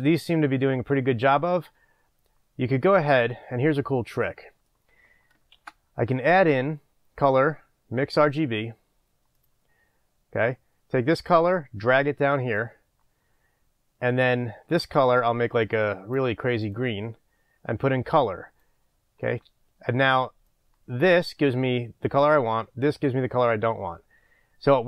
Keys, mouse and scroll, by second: 8.4-9.5 middle drag, 8.4 shift+a, 9.5 click, 15.1-15.6 drag, 16.8 click, 17.9 click, 20.6-24.8 drag.